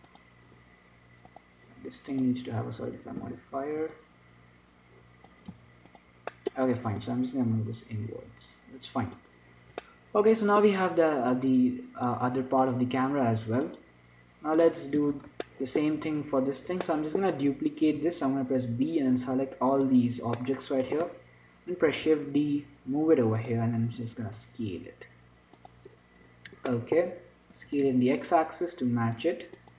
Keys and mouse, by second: 0.4 right click, 2.4-3.5 right drag, 3.3-6.2 drag, 5.8 z, 6.2-7.2 middle drag, 7.2-9.0 drag, 7.2-9.0 right drag, 9.9-11.6 middle drag, 11.6-13.3 drag, 13.3 middle click, 15.0 click, 15.3 z, 18.1-22.2 middle drag, 18.1 b, 22.2 shift+d, 24.1 s, 26.2 middle click, 27.8 s.